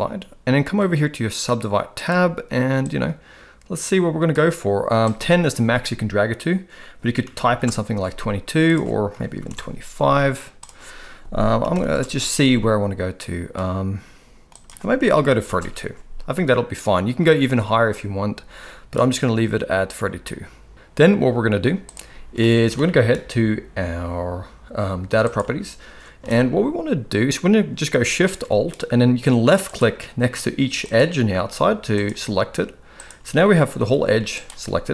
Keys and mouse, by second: 2.8-4.3 drag, 5.0-7.5 drag, 7.4 2, 8.6 click, 10.6-11.9 drag, 14.5-15.5 drag, 22.4 middle click, 25.3 click, 26.2 alt+a, 29.7 alt+shift+click, 30.9-32.0 alt+shift+drag, 33.0 alt+shift+click, 33.8 g.